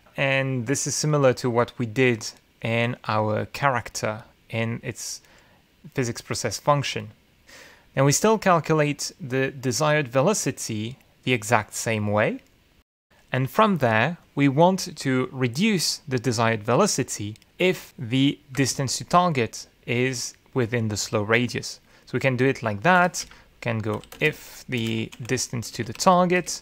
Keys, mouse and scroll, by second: 9.1 Down, 19.7 ctrl+Return, 24.0 Return, 24.2 Up, 24.7-26.6 typing.